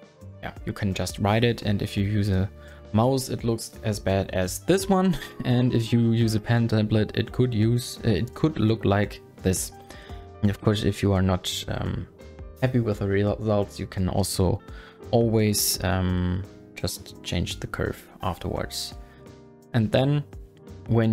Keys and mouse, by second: 0.8 ctrl+z, 1.2 ctrl+z, 1.8 ctrl+z, 2.3 ctrl+z, 10.6 Tab.